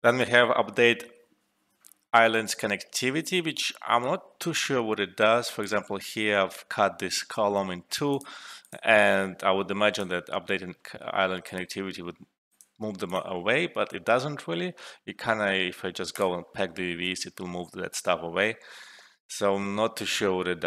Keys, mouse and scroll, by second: 5.5 click, 9.3-10.2 typing, 9.9 shift+click, 11.4 click, 13.0 typing, 15.3 typing, 16.1 click, 18.4 typing.